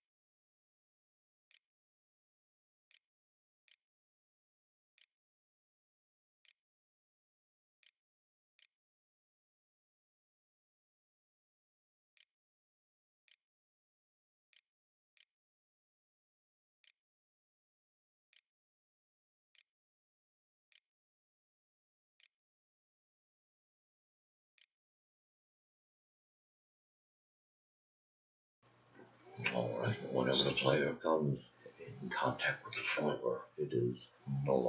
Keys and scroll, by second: 0.0-3.2 typing, 3.0 shift+Up, 4.1 Return, 4.8 End, 6.8 shift+[, 7.8 [, 8.1 ], 8.1 Return, 9.5-21.3 typing, 16.6 Tab, 22.0 Tab, 22.8-25.4 typing.